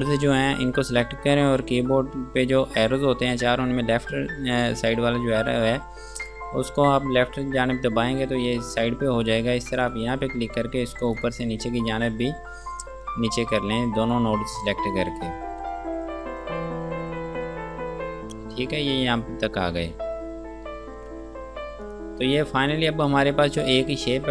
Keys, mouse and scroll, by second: 4.2 Left, 7.4 scroll down 1, 8.2 scroll up 1, 8.5 scroll down 1, 10.1 click, 10.7 scroll up 1, 11.4 click, 13.6 Down, 16.0 scroll down 1, 16.5 Down, 19.6-20.5 scroll down 1, 21.7 ctrl+space, 22.1 click, 22.7 F2, 23.0 click.